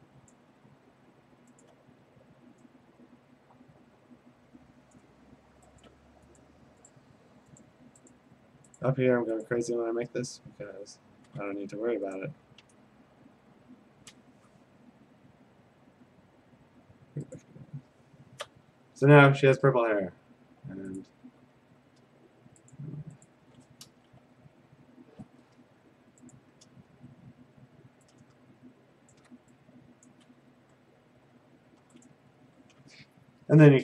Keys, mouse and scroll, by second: 0.3 click, 1.7 click, 4.9 click, 5.8 alt+click, 6.4 click, 6.9 click, 7.6 click, 7.9 alt+click, 8.1 click, 8.3 alt+click, 8.8 click, 8.9 alt+click, 9.6 click, 11.6 a, 12.2 right click, 13.4-15.3 right drag, 17.5-21.2 drag, 21.2 g, 22.7 click, 23.3 click, 23.9 alt+BackSpace, 26.4 click, 26.9 g, 29.1-30.1 shift+click, 30.1 shift+click, 30.1-30.4 click, 30.1 click, 32.1 click.